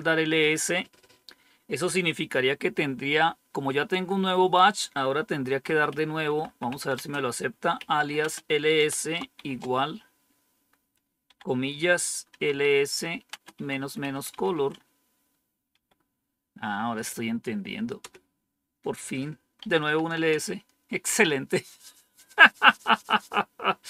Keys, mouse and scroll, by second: 5.3-9.3 typing, 11.2-15.7 typing, 17.9 Return, 19.3-20.2 typing.